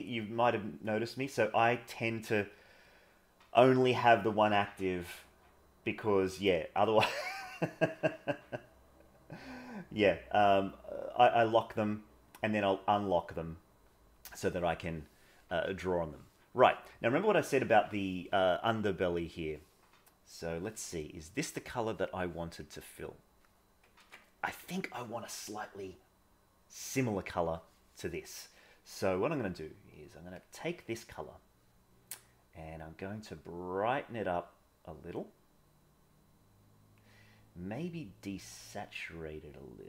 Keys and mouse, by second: 16.1 middle click, 22.6 click, 24.0 ctrl+z.